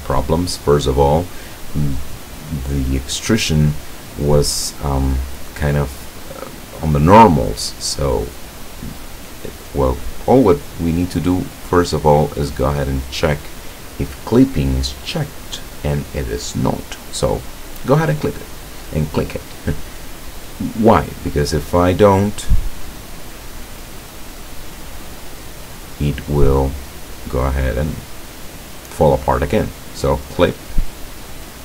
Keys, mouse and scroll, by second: 2.0-3.7 middle drag, 12.9 click, 17.4 click, 21.1 click, 22.6-27.7 drag, 30.0 click, 31.3-31.6 drag.